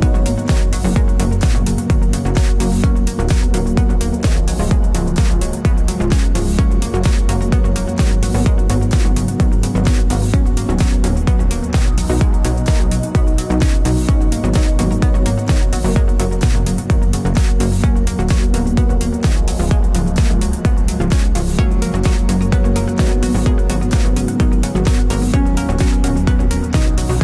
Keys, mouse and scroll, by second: 0.6-2.2 middle drag, 2.2 click, 9.4-12.0 middle drag, 16.1 click, 17.6 click, 24.4-25.5 middle drag, 25.5 click, 26.0-27.0 middle drag, 27.0 scroll up 2.